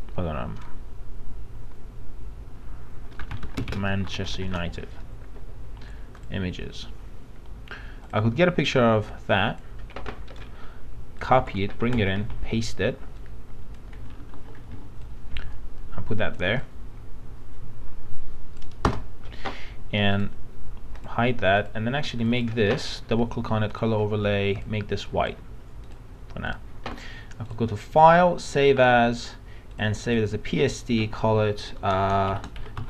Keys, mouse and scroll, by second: 3.2-3.7 typing, 6.2 click, 10.3 right click, 11.2 click, 11.4 alt+Tab, 12.3 ctrl+v, 12.9 ctrl+v, 13.2 click, 15.0-18.8 alt+shift+drag, 18.8 Return, 20.1 right click, 21.0 click, 32.1-32.8 typing.